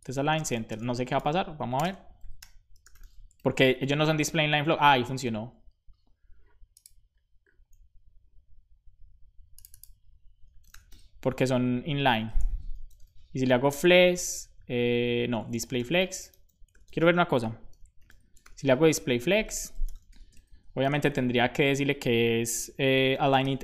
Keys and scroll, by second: 0.3-3.2 typing, 3.3 super+s, 3.6 Right, 10.3-11.3 typing, 11.3 Right, 11.4 Right, 12.0 alt+shift+Right, 12.6-13.6 typing, 13.7 Right, 15.3 Left, 15.4 Left, 15.8-20.8 typing, 22.9-23.6 typing.